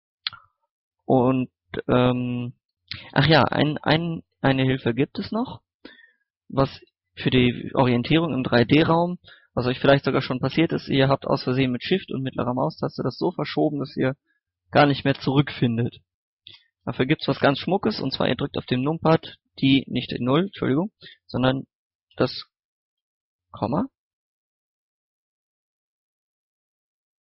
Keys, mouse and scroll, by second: 2.5 scroll down 1, 3.2 click, 3.7 middle click, 4.7 click, 5.4 middle click, 5.9 scroll down 1, 6.4 middle click, 11.2 shift+middle click, 12.3 scroll down 1, 12.5 scroll up 1, 12.6-16.1 middle drag, 16.4 scroll down 1, 16.7 scroll up 1, 16.9-17.4 scroll down 1, 17.6-18.0 scroll up 1, 18.8 KP_0, 21.2 KP_Decimal, 23.8 middle click, 24.5 scroll down 1.